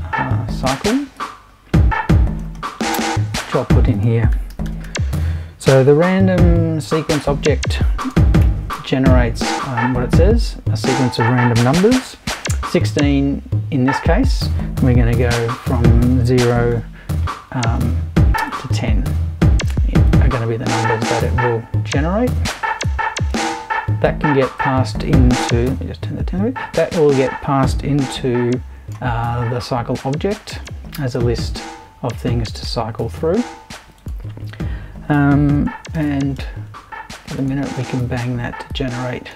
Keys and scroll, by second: 3.4 super+i, 4.3 super+r, 4.4-6.5 typing, 8.0 space, 8.4 l, 8.7 6, 11.2 space, 15.4-17.2 typing, 36.0 shift+super+b.